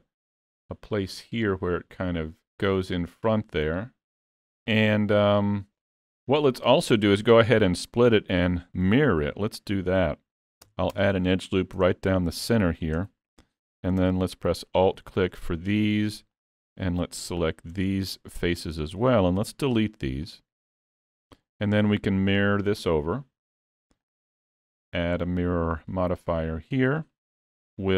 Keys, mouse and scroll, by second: 4.3 scroll down 3, 5.8 middle click, 6.6 scroll up 2, 7.0 shift+middle click, 7.4 middle click, 9.2 ctrl+r, 11.8 Tab, 12.5 middle click, 13.0 Tab, 13.3 3, 14.7 alt+click, 15.1 middle click, 16.4 shift+click, 17.8 middle click, 19.4 x, 21.0 Tab, 21.3 middle click, 24.1 click.